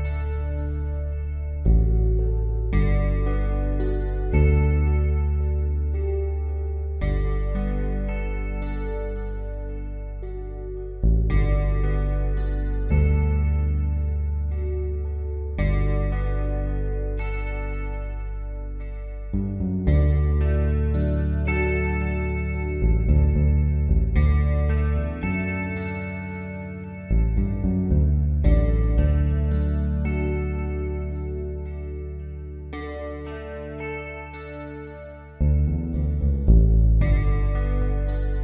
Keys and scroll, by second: 2.3 space, 28.7 v, 32.0 ctrl+0, 34.5 ctrl+t.